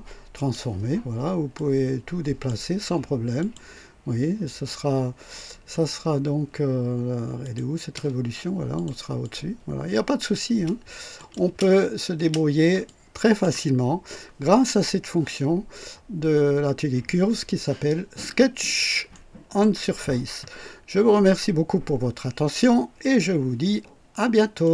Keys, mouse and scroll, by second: 0.4 click, 1.5-2.6 drag, 3.3 click, 7.3 click, 7.8 space, 8.7 click, 9.1-10.4 drag, 10.4 space, 11.1 click, 11.4 space, 12.1 space, 12.1 space, 12.7-13.5 drag, 19.0-19.7 right drag, 20.5 click, 22.9 right click, 24.5 click.